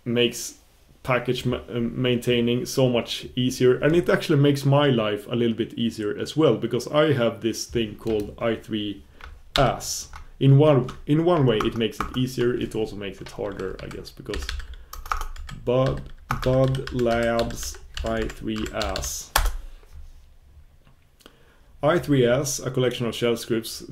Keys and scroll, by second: 20.5 super+b.